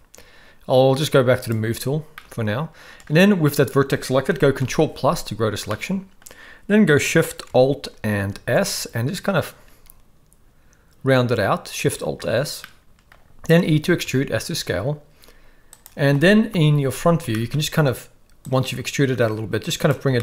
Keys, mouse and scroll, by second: 1.4 click, 2.1-3.0 middle drag, 4.6 ctrl+KP_Add, 5.6 middle click, 8.3 alt+shift+s, 12.6 middle click, 13.6 e, 16.5 KP_1, 17.3 shift+middle click, 18.5-19.9 drag.